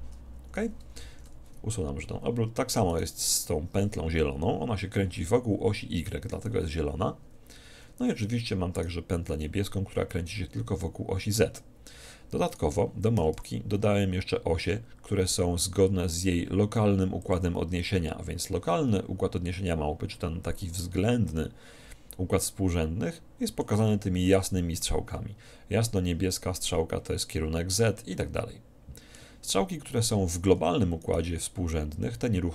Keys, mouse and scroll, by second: 1.3 alt+r, 3.1-4.7 right drag, 6.5 r, 9.3 right click, 9.3 r, 9.5-10.5 drag, 12.7 click, 13.3 r, 13.5-14.5 right drag, 17.6-19.3 drag, 20.9-22.9 middle drag, 28.2-30.3 middle drag, 31.1-32.5 right drag.